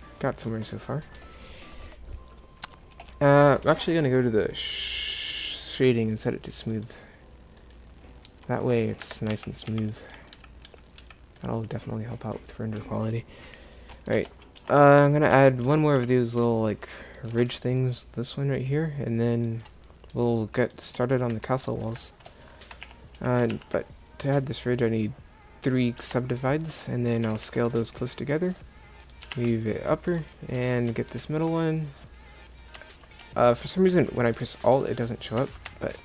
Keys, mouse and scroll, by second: 8.3 Tab, 9.0 Tab, 9.3-11.0 typing, 14.0 right click, 14.6 Tab, 15.3 Tab, 15.7 Tab, 16.0 a, 22.9 a, 23.2 a, 23.5 ctrl+r, 27.3 s, 29.3 g, 30.6 a.